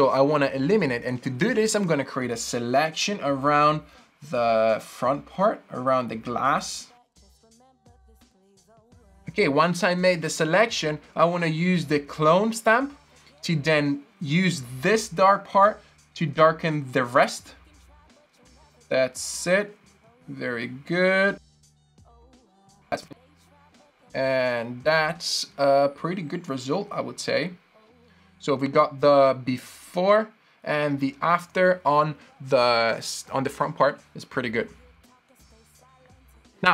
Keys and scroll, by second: 21.9 z.